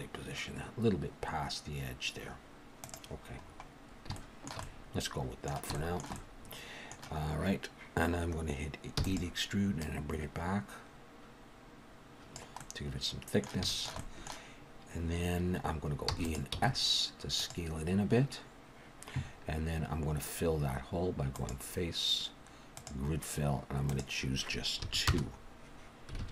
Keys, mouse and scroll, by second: 3.4-4.1 scroll up 1, 4.1 scroll up 2, 4.1 shift+middle click, 4.6 middle click, 5.7 shift+middle click, 6.1 middle click, 9.0 e, 9.8 click, 12.6 middle click, 13.7 shift+middle click, 14.0 middle click, 16.1 e, 16.5 s, 21.3 click, 24.8 click, 26.2 alt+a.